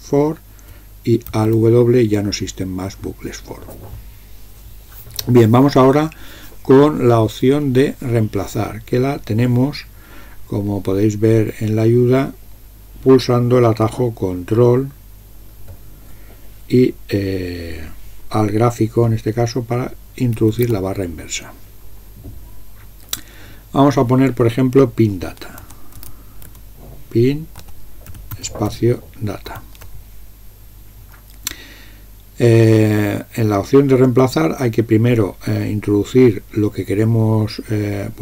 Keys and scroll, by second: 1.3 alt+w, 20.4 ctrl+\, 25.4-29.5 typing.